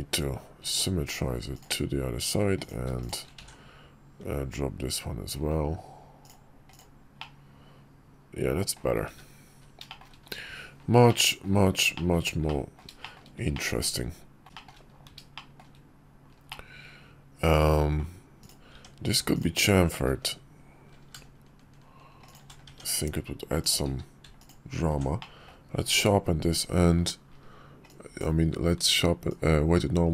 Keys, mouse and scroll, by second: 1.3-2.4 drag, 2.7 shift+click, 3.1 alt+x, 6.0 click, 6.4 click, 6.9-8.5 middle drag, 9.6 shift+middle drag, 10.8-11.1 middle drag, 11.7 shift+middle click, 12.2-12.5 middle drag, 12.7 shift+middle drag, 13.3 middle click, 15.1 shift+middle drag, 16.2-17.7 middle drag, 18.4 Tab, 19.1-20.1 drag, 20.7 ctrl+b, 22.4 Tab, 23.6 q, 24.9 drag, 25.7 ctrl+`.